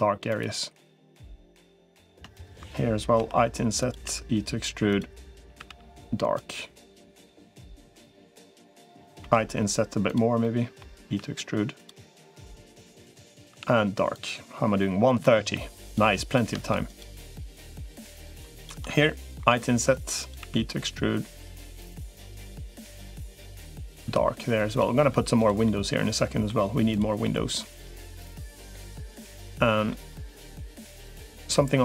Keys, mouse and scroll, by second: 1.2 middle click, 3.0 i, 3.8 e, 5.2 a, 5.4 g, 6.9 middle click, 7.8 shift+click, 9.0 i, 10.2 middle click, 10.8 e, 13.4 g, 15.0 middle click, 15.6 click, 16.4 shift+click, 19.2 i, 20.2 e, 23.8 g, 25.4 middle click, 27.0-28.7 middle drag, 29.1 middle click, 30.4 middle click, 31.2 middle click.